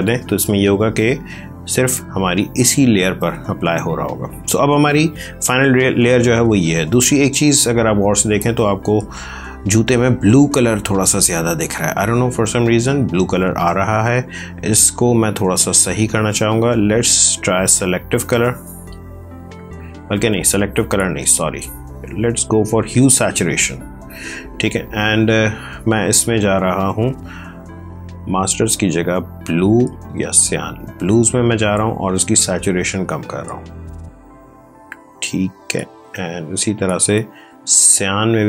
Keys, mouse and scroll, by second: 1.3 click, 7.2 space, 7.5 ctrl+click, 15.2 click, 17.7 click, 18.3 click, 20.6 ctrl+z, 22.2 click, 27.8 click, 30.9 click, 36.5 click.